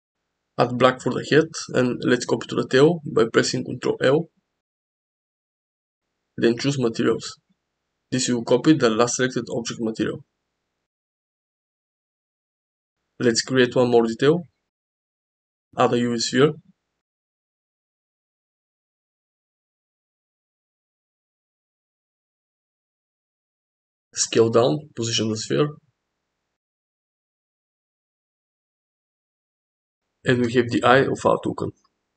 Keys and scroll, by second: 4.8 ctrl+l, 12.6 shift+a, 23.1 s, 24.5 g, 26.0 z, 26.9 z, 28.3 s, 30.0 g, 31.8 s.